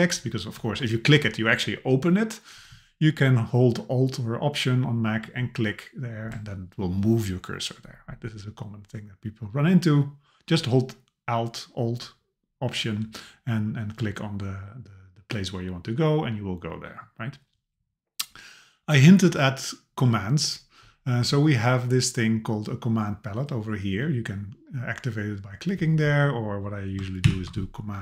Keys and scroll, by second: 27.2 super+/.